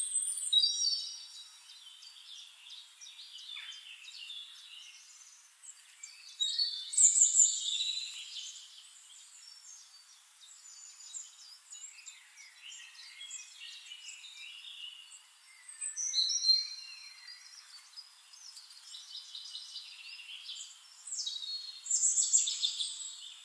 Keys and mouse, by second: 0.6 ctrl+d, 1.1-7.8 ctrl+drag, 4.6 right click, 5.3-6.8 middle drag, 8.3 click, 9.9 click, 12.2-16.0 drag, 12.9-16.0 shift+right drag, 14.4-16.0 middle drag, 16.2-17.3 middle drag, 18.6-19.8 middle drag.